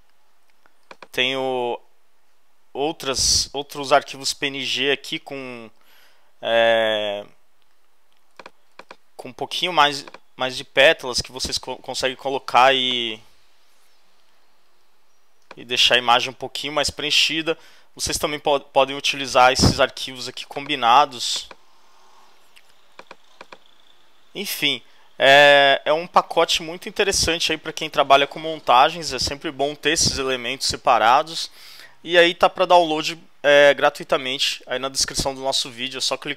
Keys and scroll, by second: 1.6 shift+super+., 16.9 Return.